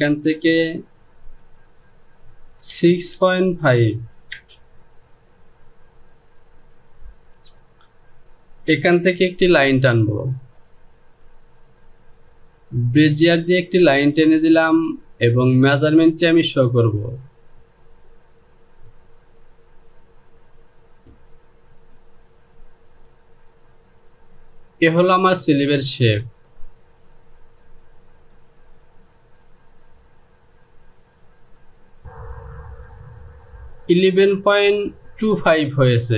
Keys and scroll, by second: 2.6 KP_6, 3.1 KP_Decimal, 3.5 KP_5, 4.2 Return.